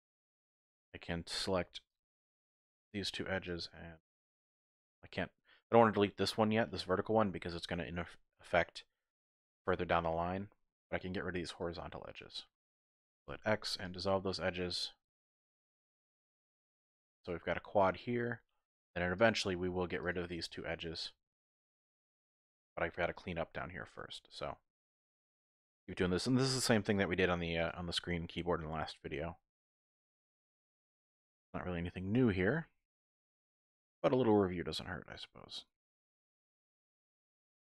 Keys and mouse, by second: 1.4 2, 2.5 alt+shift+click, 3.6 alt+shift+click, 7.2 shift+click, 10.1 shift+click, 12.1 alt+shift+click, 13.2 x, 14.6-17.2 drag, 20.5-21.6 drag, 21.5 typing, 22.4 shift+click, 23.3 click, 24.7 click, 26.9 click, 26.9 typing, 30.0-32.4 typing, 30.8 click.